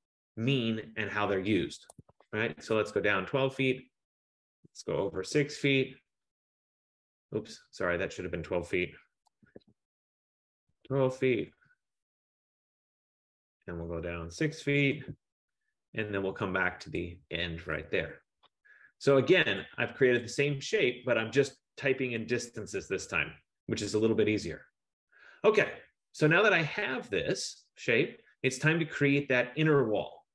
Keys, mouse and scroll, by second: 1.8-2.9 typing, 5.0-6.0 typing, 7.8 typing, 9.7 ctrl+z, 10.5-11.7 typing, 14.2-14.9 typing, 17.1 click, 18.0 Return, 19.7 click, 20.3 click, 22.4 F15, 25.6-26.3 scroll.